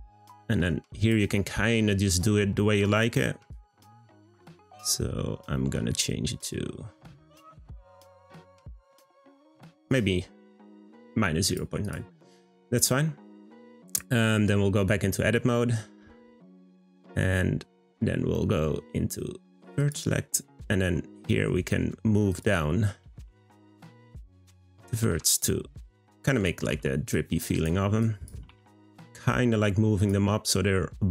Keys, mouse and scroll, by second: 1.8-3.5 middle drag, 3.5-6.5 drag, 11.4 drag, 11.8 click, 12.4-15.4 middle drag, 15.4 Tab, 17.3-19.8 middle drag, 19.8-21.4 drag, 21.4 middle click, 22.3 click, 23.0 g, 24.6 click, 25.0 g, 26.2 click, 26.6 g, 28.0 click, 28.4 g.